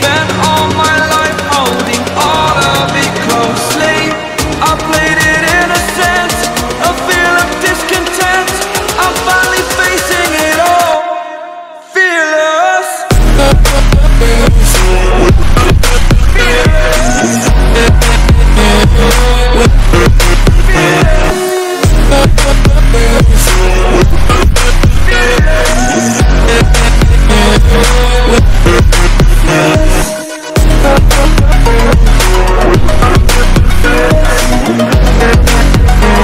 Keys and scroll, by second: 7.3 ;, 7.4 [.